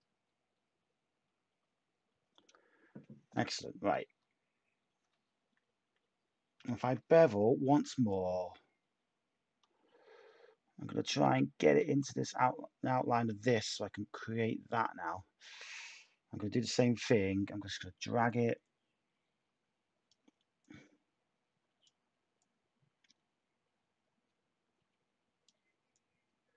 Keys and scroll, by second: 6.5 typing.